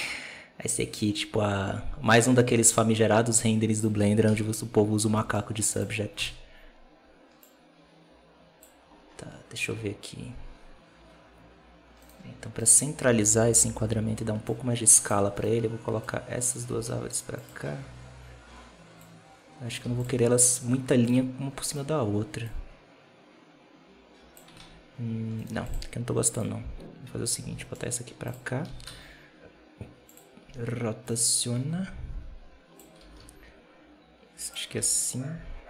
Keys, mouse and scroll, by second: 4.1 KP_7, 5.0 g, 6.0 KP_0, 7.3-8.8 drag, 8.8-9.1 scroll down 1, 9.1-9.6 scroll up 2, 9.6 alt+a, 11.9-12.5 right drag, 14.4 click, 15.3-15.9 right drag, 15.9 click, 16.6 r, 18.9 click, 19.7 x, 21.6-22.3 right drag, 22.3-24.5 drag, 24.5 alt+a, 25.3 right click, 25.4 x, 26.3 right click, 27.3 alt+d, 28.5 r, 30.9-32.9 drag, 32.9 r, 34.7 alt+a.